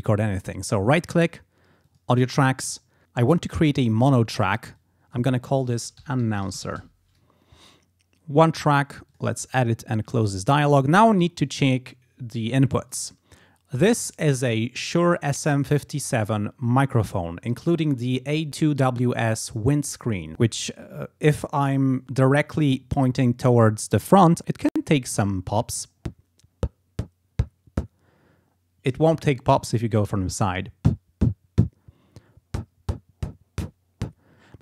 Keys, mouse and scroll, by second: 0.9 right click, 1.9 click, 4.8 click, 5.5-7.3 typing, 9.2 click, 12.9 click, 24.4 click.